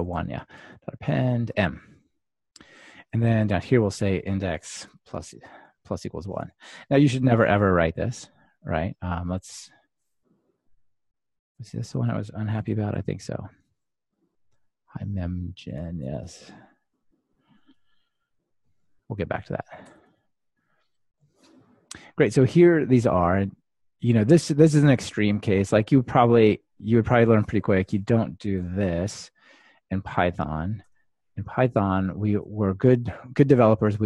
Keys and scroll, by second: 13.1 ctrl+r, 20.4 ctrl+r, 28.6 super+c, 28.7 super+/, 30.0 super+z, 31.3 super+z, 33.0 super+v.